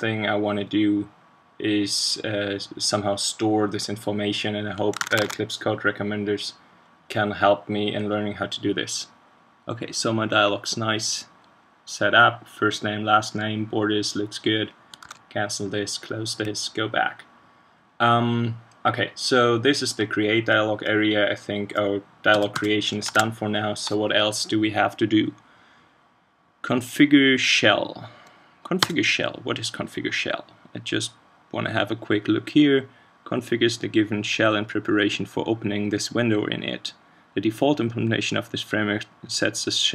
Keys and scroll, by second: 5.0 super+Tab, 15.0 super+q, 23.0 ctrl+space.